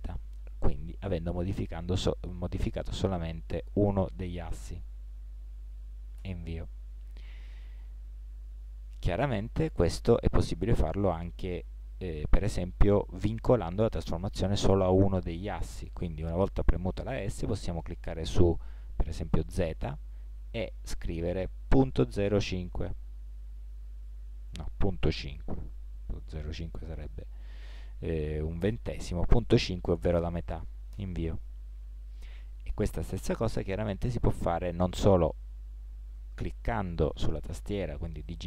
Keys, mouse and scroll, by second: 9.1 s.